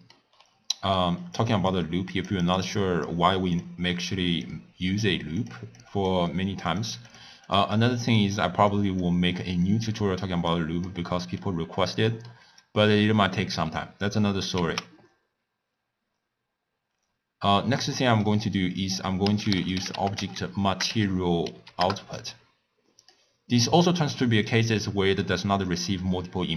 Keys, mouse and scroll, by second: 0.4-1.0 scroll down 3, 1.0-1.7 middle drag, 1.7 click, 2.6 click, 3.6 click, 5.4 drag, 5.8-6.8 drag, 7.1 click, 7.5 click, 7.7 click, 9.7 click, 10.5 click, 11.2 middle click, 11.6 scroll up 1, 11.7 scroll down 1, 12.0 scroll up 1, 12.1-14.5 middle drag, 14.5 ctrl+a, 24.5 click.